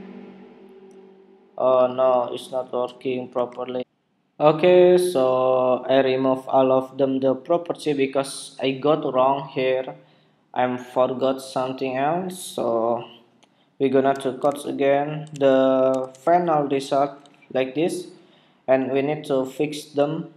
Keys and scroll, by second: 3.2 super+Tab, 14.4 super+Tab, 15.4 super+Tab, 15.8 super+Tab, 16.2 super+Tab, 17.5 super+r, 18.6 super+r.